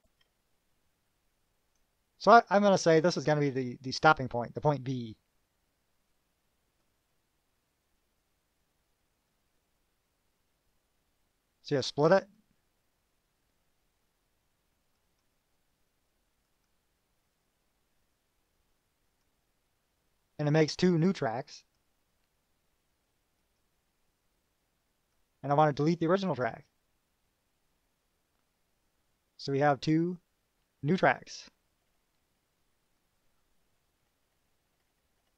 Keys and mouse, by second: 0.0 KP_Add, 1.4-2.1 drag, 2.1 middle click, 7.0 click, 9.5 click, 12.6 click, 15.2 click, 16.7 click, 18.1 click, 19.3 click, 21.8 click, 23.6 click, 25.4 click, 32.1 KP_Subtract, 33.2 click, 33.9 KP_Subtract, 34.9 KP_Subtract.